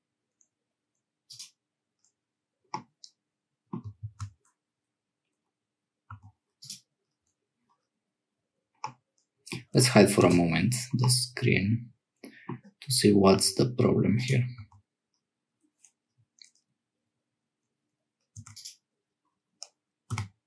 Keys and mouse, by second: 2.7-3.8 middle drag, 4.1 ctrl+z, 6.1 Tab, 6.6 click, 8.8 middle click, 10.2 h, 11.0-12.6 middle drag, 13.3 Tab, 14.1 click, 14.6 Tab, 18.4 1, 18.5 click, 20.1 g.